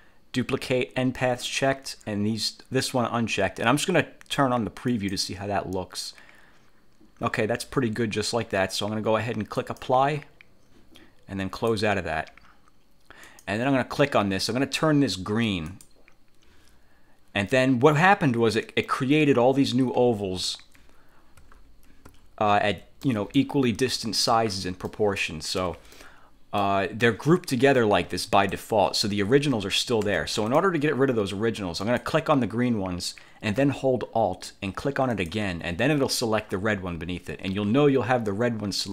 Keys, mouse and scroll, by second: 5.0 click, 9.7 click, 11.6 click, 13.4 click, 15.8 click, 20.4-20.9 ctrl+scroll up 2, 21.6-22.0 ctrl+scroll up 2, 22.3-23.0 ctrl+scroll down 4, 23.2 ctrl+click, 24.1-24.4 ctrl+scroll up 2, 24.6 ctrl+scroll down 2, 25.0 ctrl+middle click, 25.7 1, 26.1 click, 27.2-28.8 drag, 30.2 ctrl+z, 30.6 ctrl+click, 32.0 click, 35.2 alt+click.